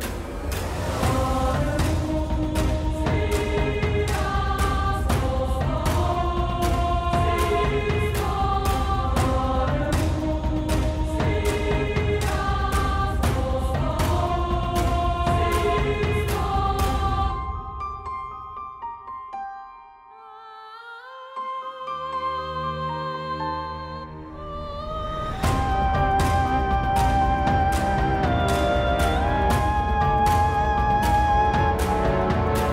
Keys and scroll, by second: 3.4 ctrl+z, 4.9 shift+z, 6.3 b, 9.1 shift+z, 11.5 alt+s, 16.4 alt+s, 21.9 Tab, 24.3 ctrl+2, 29.6 Tab.